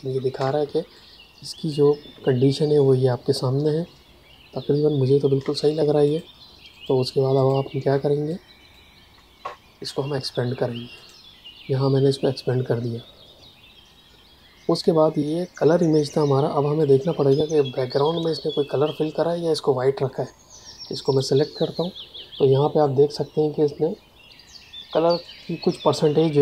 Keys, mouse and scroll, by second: 0.3 space, 0.9 ctrl+click, 5.3 space, 6.0 ctrl+alt+click, 6.6 ctrl+alt+click, 7.3 ctrl+alt+click, 8.2 click, 16.7 click, 18.0 a, 21.0 click.